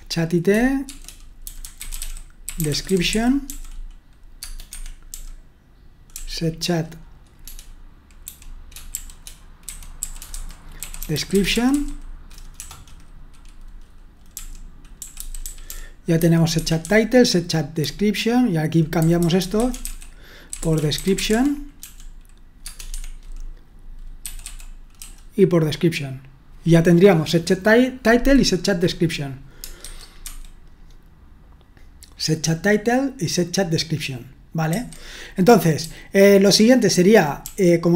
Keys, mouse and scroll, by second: 1.2-6.1 typing, 4.4 Tab, 4.7 Escape, 8.2-12.6 typing, 14.7-22.3 typing, 16.5 Escape, 22.6 Tab, 22.9 Escape, 24.2-24.9 typing, 29.8 super+1, 30.3 super+2, 34.7 super+1, 35.8-37.9 typing.